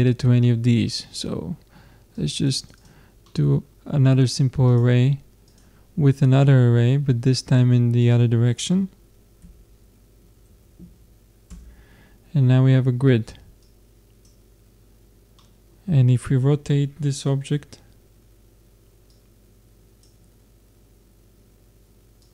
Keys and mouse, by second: 2.2-3.2 drag, 3.2-5.1 middle drag, 5.1-6.5 drag, 6.9-8.0 middle drag, 8.0-9.9 drag, 13.6-15.4 drag, 15.4-17.2 middle drag, 19.1-20.4 drag, 20.7 click, 20.9-22.2 middle drag, 22.2-22.3 drag.